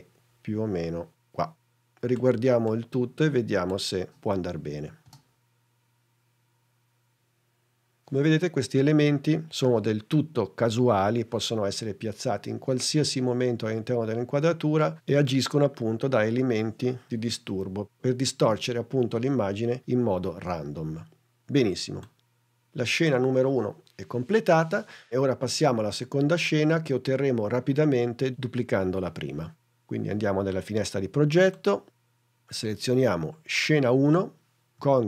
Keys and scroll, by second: 5.0 space.